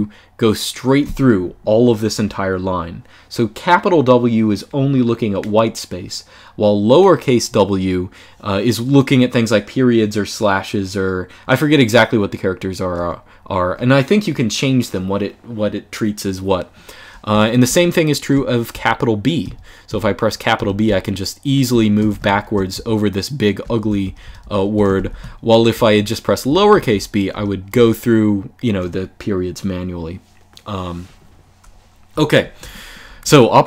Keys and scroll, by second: 18.4 shift+b, 19.1 shift+b, 19.6 shift+b, 20.3 shift+b, 21.8 shift+4, 22.4 shift+b, 23.7-27.4 typing, 31.8-33.6 typing.